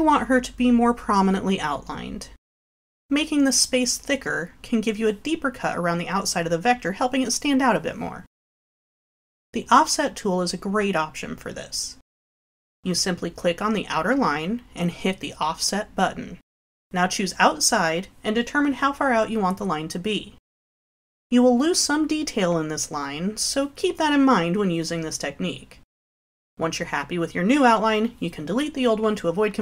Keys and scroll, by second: 20.2 6, 27.1 Delete.